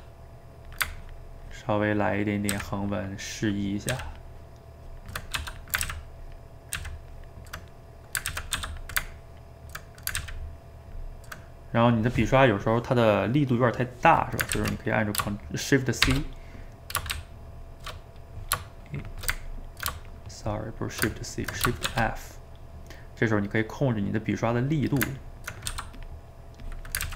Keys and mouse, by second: 1.1-2.5 ctrl+drag, 2.5 ctrl+z, 2.9-3.9 ctrl+drag, 3.9 ctrl+z, 4.1-5.3 ctrl+drag, 5.3 f, 5.9 ctrl+z, 6.2 ctrl+click, 6.8 ctrl+z, 7.1 ctrl+click, 7.7 middle click, 8.3 ctrl+z, 8.5 f, 9.2 ctrl+click, 9.8 middle click, 10.2 ctrl+z, 10.6 ctrl+click, 11.4-14.4 middle drag, 14.5 ctrl+z, 15.0-16.1 middle drag, 16.1 shift+c, 17.1-17.9 shift+c, 18.6-20.9 shift+middle drag, 20.9 shift+right click, 21.1 ctrl+middle click, 21.9 shift+f, 25.2 ctrl+middle click, 25.7 f, 26.2 middle click, 26.6 click, 27.1 ctrl+z.